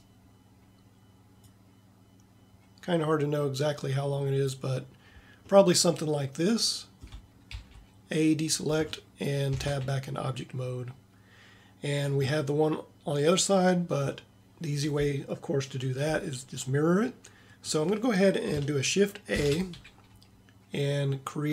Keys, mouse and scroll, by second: 5.5-8.8 middle drag, 7.6 a, 9.6 Tab, 19.4 shift+a.